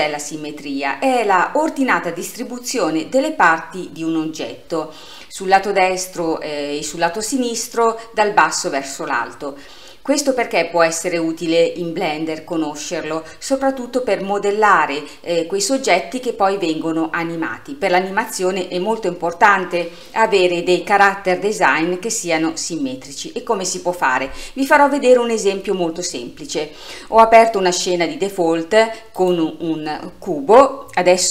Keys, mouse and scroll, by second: 29.2 click.